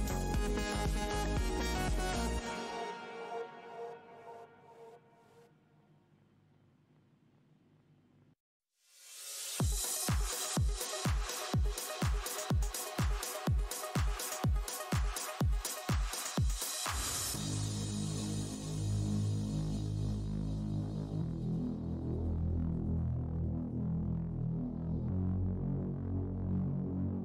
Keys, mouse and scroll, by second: 0.3 alt+click, 0.6 alt+scroll up 1, 0.6 f, 1.4 click, 1.4 Tab, 1.6 scroll down 1, 2.4 alt+scroll down 1, 3.0 Tab, 3.9 click, 4.0 Tab, 5.3 right click, 5.7 alt+click, 5.9-6.2 alt+scroll up 1, 6.5 alt+scroll, 6.5 click, 6.7 Tab, 6.7 alt+click, 7.1-7.6 alt+scroll up 1, 7.1 r, 7.7 click, 8.5 Tab, 8.7 shift+right click, 9.1 alt+click, 10.0-10.7 typing, 10.8 click, 12.0 right click, 13.1 alt+click, 14.1 click, 14.7 alt+Tab, 14.9 alt+click, 15.1 alt+Tab, 15.9 click, 16.4 Tab, 17.1 click, 17.9 Tab, 18.1 alt+click, 18.6 Tab, 18.7 right click, 19.1 Tab, 19.7 click, 20.8 Tab, 20.8 w, 21.4 Tab, 21.5 click, 22.5 click, 22.8 click, 23.8 right click, 23.9 Tab, 24.9 click, 24.9 Tab, 25.0 click, 25.1 Tab, 25.4 shift+right click, 26.1 Tab, 26.4 right click, 26.5 Tab, 26.6 click, 27.0 shift+right click.